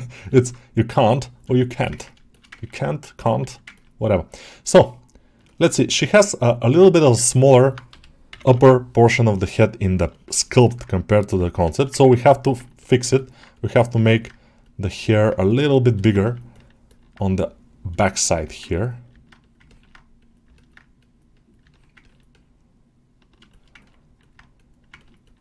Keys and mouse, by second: 0.1 ctrl+alt+middle click, 1.4 alt+shift+middle click, 1.8 ctrl+alt+middle click, 2.2 shift+middle click, 2.4 ctrl+alt+middle click, 3.6-4.7 ctrl+alt+middle drag, 5.3-6.4 alt+middle drag, 7.3 alt+middle click, 10.0 middle click, 10.2 ctrl+middle click, 10.5 alt+middle click, 11.6 alt+shift+middle click, 11.8 ctrl+alt+middle click, 12.1 click, 12.4 ctrl+alt+middle click, 12.7 ctrl+alt+middle click, 13.0 alt+middle click, 13.4 click, 13.9 alt+middle click, 15.0 middle click, 15.8 ctrl+alt+middle click, 16.4 alt+middle click, 16.7 alt+middle click, 17.1 click, 17.9 alt+shift+middle click, 18.2 alt+middle click, 19.5 ctrl+alt+middle click, 20.4 alt+middle click, 20.8 click, 21.6 middle click, 21.9-23.3 ctrl+alt+middle drag, 23.4 alt+shift+middle click, 23.7 ctrl+middle click, 24.1 middle click, 24.8 ctrl+alt+middle click, 25.1 alt+middle click.